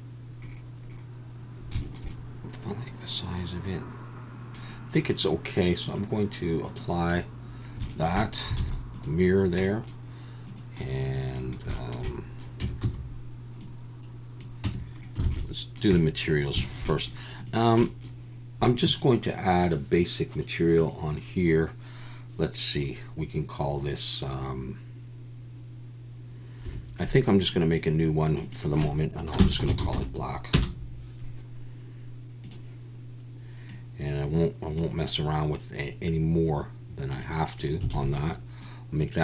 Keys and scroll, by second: 8.6 alt+a, 12.6 Tab, 12.8 a, 14.6 Tab, 15.2 alt+a, 38.0 alt+a.